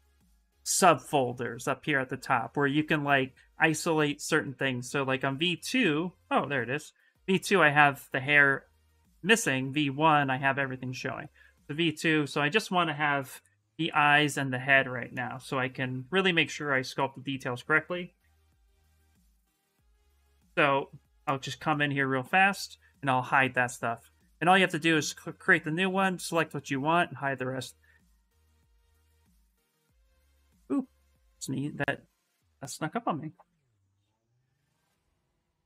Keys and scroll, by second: 11.6 s, 13.0 shift+m, 13.7 s, 16.9-19.1 typing, 34.7 s.